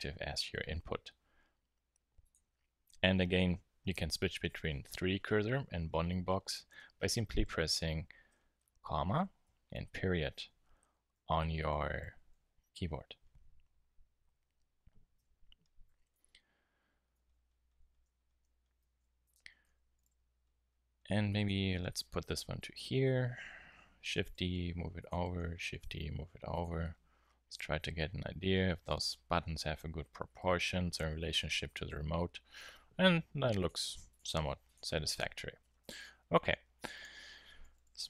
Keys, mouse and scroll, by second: 8.3 ,, 9.1 ., 10.8-12.4 typing, 15.1 ,, 15.8 KP_1, 16.2 KP_3, 16.8 Tab, 17.1 z, 18.9 z, 19.9 g, 21.4 click, 24.0 shift+d, 25.1-27.0 drag, 25.2 shift+d, 33.8 shift+x, 35.6-37.8 typing.